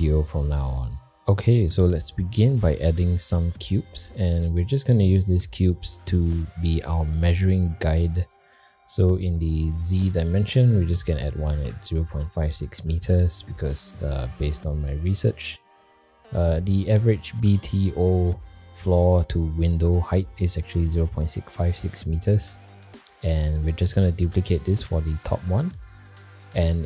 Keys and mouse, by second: 2.9 shift+a, 6.4 g, 10.2-13.8 drag, 14.3 middle click, 15.4-15.8 shift+middle drag, 17.4 g, 20.9 middle drag, 22.9 shift+middle click, 23.9 shift+d.